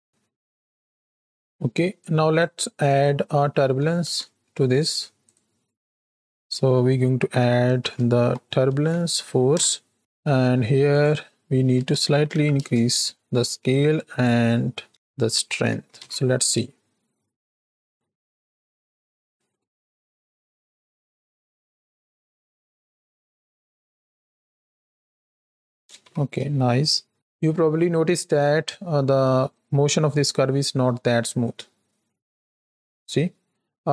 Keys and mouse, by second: 0.7 space, 1.9 click, 2.8-5.3 drag, 6.2-10.1 drag, 10.3 middle click, 10.8-12.6 drag, 14.1-15.3 drag, 15.8 shift+Right, 15.9 shift+Left, 16.6 space, 25.6 space, 26.0 shift+Left, 26.3 space, 33.5 space.